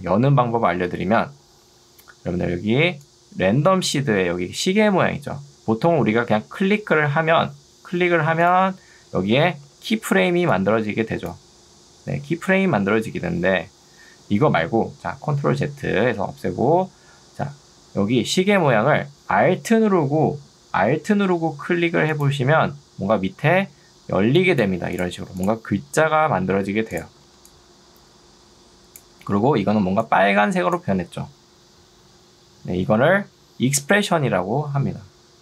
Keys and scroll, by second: 1.8 ctrl+2, 5.6 Escape, 10.4 ctrl+2, 14.4 Escape, 16.0 ctrl+z, 24.2 ctrl+2, 27.4 ctrl+2, 34.2 Escape.